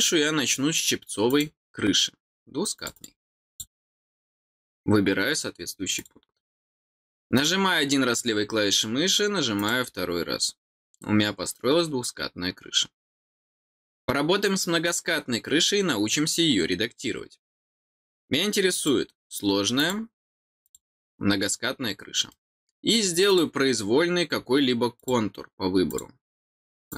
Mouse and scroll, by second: 1.2 click, 2.7 click, 2.9 click, 3.4 click, 5.9 click, 7.3 click, 9.5 click, 18.7 click, 19.7 click, 20.6 click, 22.2 middle click, 23.2 click, 24.9 click, 25.8 click, 26.8 click.